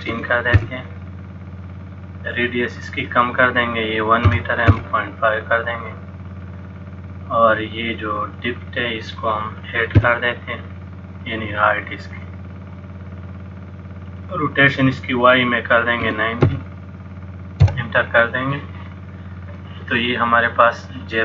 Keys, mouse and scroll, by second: 2.9 click, 8.4 click, 14.9 click.